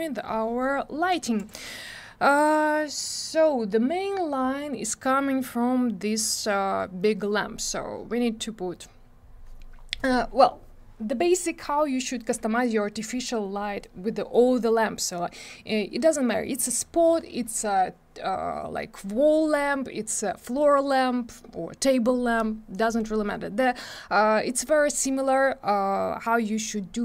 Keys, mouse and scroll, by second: 1.3 click.